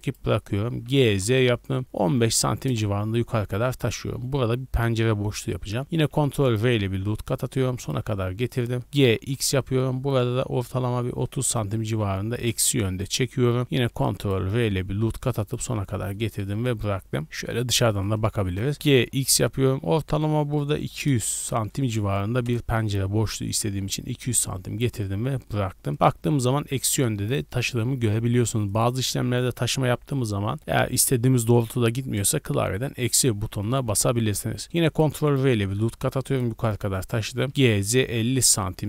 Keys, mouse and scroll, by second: 0.7 g, 1.0 z, 2.0 KP_1, 2.2 KP_5, 2.6 KP_Enter, 5.9 ctrl+r, 7.8-8.8 drag, 8.8 g, 9.1 x, 11.1 KP_3, 11.4 KP_0, 11.8 KP_Subtract, 12.4 KP_Enter, 13.8 ctrl+r, 15.4 click, 16.1 middle click, 16.7 scroll up 1, 16.8-17.5 scroll down 6, 17.6 shift+middle click, 18.0 scroll up 1, 18.4 shift+middle click, 18.7 g, 19.1 x, 20.9 KP_2, 21.1 KP_0, 21.3 KP_0, 21.9 KP_Subtract, 22.4 KP_Enter, 25.9-27.0 drag, 28.7-31.0 drag, 33.3-34.6 middle drag, 34.6 ctrl+r, 36.2 click, 37.5 g, 37.5 z, 37.9 KP_5, 38.2 KP_0, 38.5 KP_Subtract.